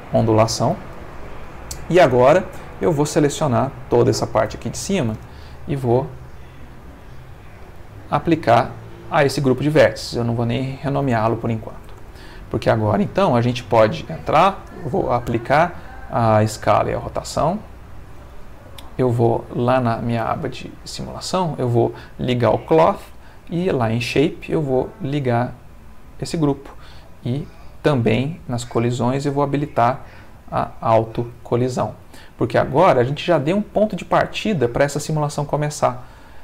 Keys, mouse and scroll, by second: 0.9 Caps_Lock, 1.1 Tab, 1.5 middle click, 2.3 Tab, 3.5 click, 4.5 alt+click, 6.6 click, 7.6 click, 9.9 click, 11.5 ctrl+middle click, 12.1 ctrl+Tab, 15.1 ctrl+a, 17.6 click, 19.6 click, 21.0 click, 22.0 middle click, 22.8 middle click, 23.8 click, 24.2 middle click, 24.8 click, 25.7 click, 28.3 click, 28.7 middle click, 30.6 click, 31.8-33.0 middle drag, 34.8-36.0 middle drag.